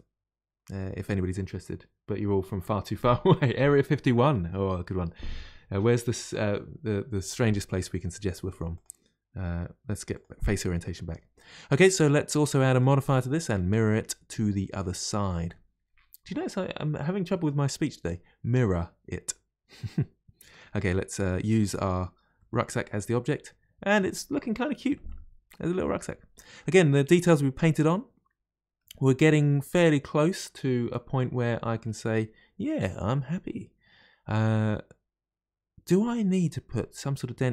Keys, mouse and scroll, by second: 8.8-10.7 drag, 10.7-12.6 middle drag, 12.6-15.8 drag, 20.5 click, 22.4-22.9 middle drag, 22.9-23.3 scroll down 3, 23.3-25.0 middle drag, 25.0-25.5 scroll up 7, 25.5-25.9 scroll down 3, 25.9-32.2 middle drag.